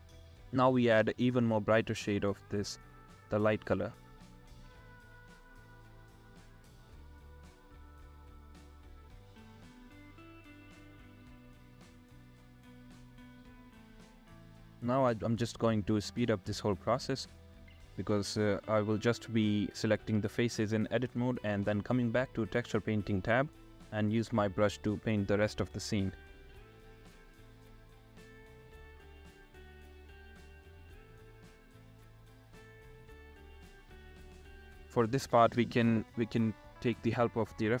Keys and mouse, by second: 0.6 ], 1.7 ctrl+z, 1.7 [, 7.6 click, 9.6 middle click, 11.7 [, 11.9 [, 12.5 ctrl+z, 12.6 [, 13.7 ctrl+z, 14.4 [, 15.6 ctrl+z, 18.8-19.8 middle drag, 20.2 click, 21.9 alt+q, 22.9 ctrl+z, 23.1 ctrl+z, 23.3-25.2 typing, 23.3 ctrl+z, 24.0 ctrl+z, 26.8 ctrl+z, 27.1-27.9 typing, 28.5 alt+q, 28.7 ctrl+z, 29.2 ctrl+z, 29.4-31.8 typing, 29.7 ctrl+z, 29.9 ctrl+z, 30.1 ctrl+z, 30.3 ctrl+z, 30.5 ctrl+z, 30.8 ctrl+z, 31.3 ctrl+z, 31.5 ctrl+z, 31.9 middle click, 33.0 [, 33.1 ctrl+z, 33.3 ], 33.7 ctrl+z, 34.6 ], 35.6 ctrl+z, 35.7 ctrl+z, 35.7-37.8 typing, 36.6 ctrl+z, 36.8 ctrl+z, 37.4 ctrl+z.